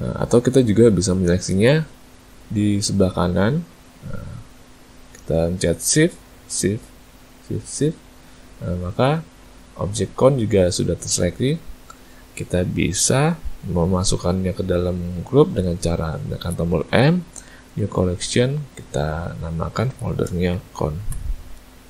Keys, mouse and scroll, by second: 1.3 a, 1.5 a, 4.1 click, 5.9 shift+click, 6.6 click, 7.5 shift+click, 7.8 shift+click, 16.9 m.